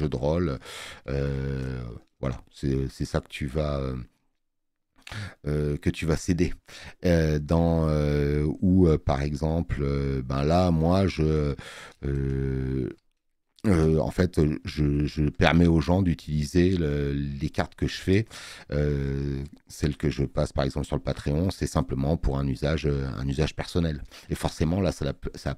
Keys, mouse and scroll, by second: 7.4 space, 7.6 click.